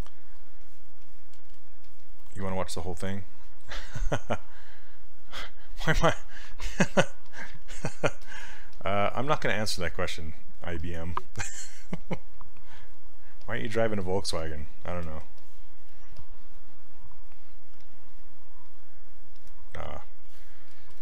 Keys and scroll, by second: 17.8 s.